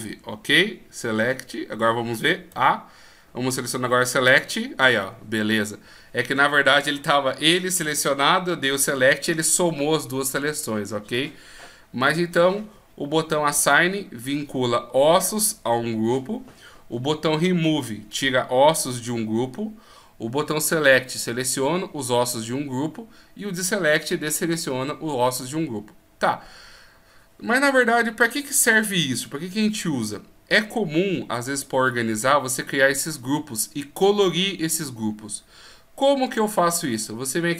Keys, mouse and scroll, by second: 2.5 a, 4.3 click.